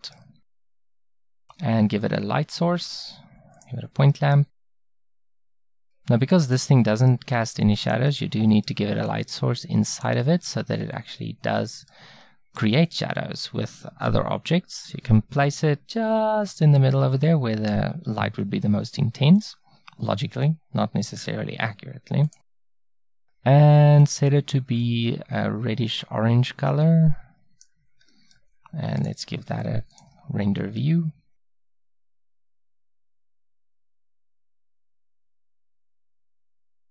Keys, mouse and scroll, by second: 0.5 a, 6.8-9.1 middle drag, 9.1-11.7 middle drag, 11.8-16.3 middle drag, 19.4-21.7 middle drag, 28.1-30.8 middle drag, 32.8 ctrl+b, 35.3-36.9 drag.